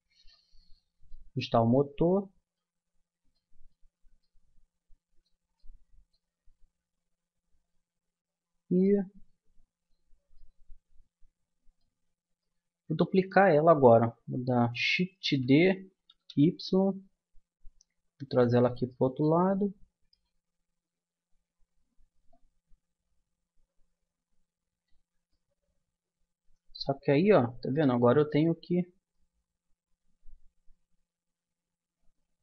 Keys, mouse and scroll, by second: 0.8-4.3 middle drag, 8.2 Tab, 15.2 shift+d, 18.9-19.9 middle drag, 20.6-22.3 middle drag, 22.3-24.1 drag, 25.3-27.3 middle drag, 28.1-31.1 middle drag.